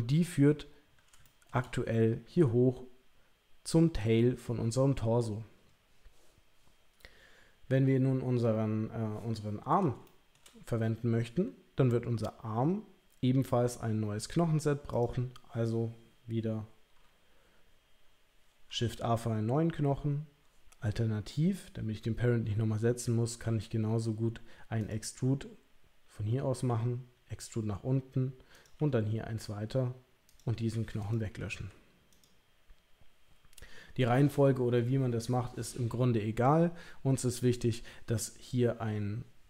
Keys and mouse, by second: 1.2 shift+middle click, 10.0 shift+middle click, 14.9 click, 23.4 e, 24.8 click, 26.6 e, 28.7 e, 31.0 click, 31.5 Delete.